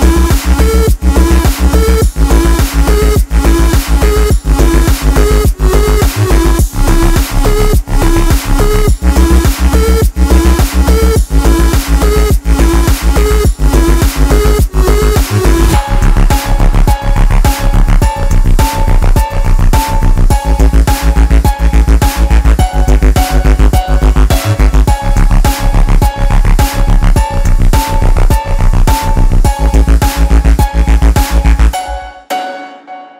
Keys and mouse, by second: 0.1 click, 2.6 click, 5.9 click, 7.6 ctrl+space, 7.7 ctrl+alt+click, 8.9 space, 8.9 click, 9.1 space, 9.4 click, 10.6 ctrl+space, 10.7 ctrl+click, 10.8 ctrl+space, 11.3 ctrl+space, 11.8 ctrl+click, 11.9 click, 11.9 space, 17.3-18.6 drag, 21.1 click, 21.2 shift+Tab, 24.1 v, 25.6 ctrl+z, 26.6 click, 31.0 click.